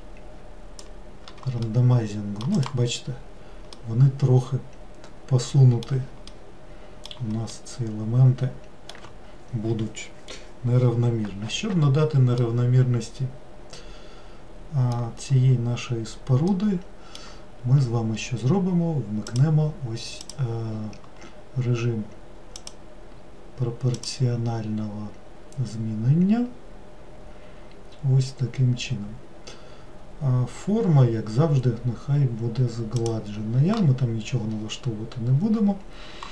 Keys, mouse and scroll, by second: 1.7-2.7 middle drag, 2.7 click, 3.8-10.8 middle drag, 12.4-15.7 middle drag, 16.5-19.4 middle drag, 19.4 click, 20.8-22.6 scroll down 1, 22.6 click, 24.1 click.